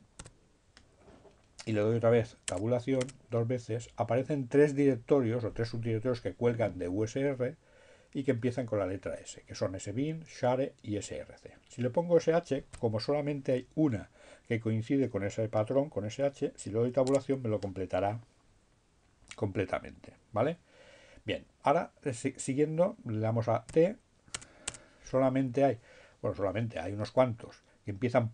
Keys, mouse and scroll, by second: 2.6 Tab, 11.5 h, 16.0 Tab, 23.8 d, 24.3 Tab.